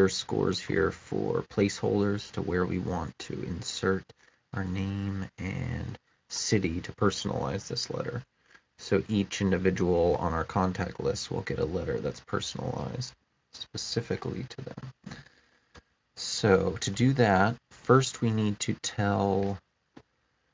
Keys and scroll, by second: 15.6 BackSpace, 16.7 space.